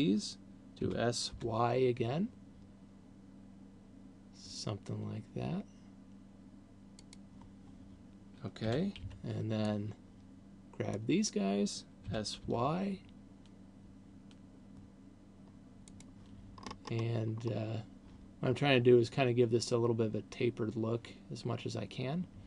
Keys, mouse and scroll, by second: 1.0 s, 7.5 click, 9.0 a, 9.5 b, 12.5 s, 16.5 click, 17.0-18.0 scroll up 5.